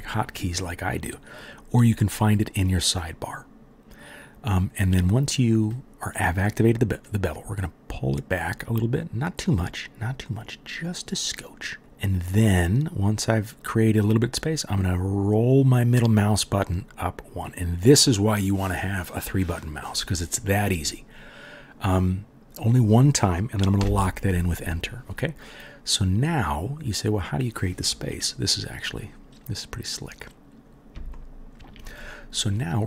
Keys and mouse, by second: 2.6-17.4 middle drag, 17.4-30.3 drag, 23.8 Return, 30.3-32.8 middle drag.